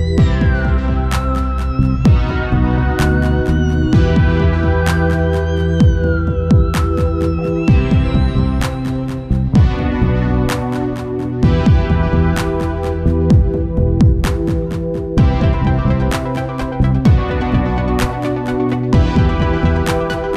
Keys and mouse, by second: 1.5 Left, 5.7-8.6 drag, 10.7 middle click, 11.7 ctrl+s, 13.2-15.0 drag, 17.3-19.1 drag, 20.3 click.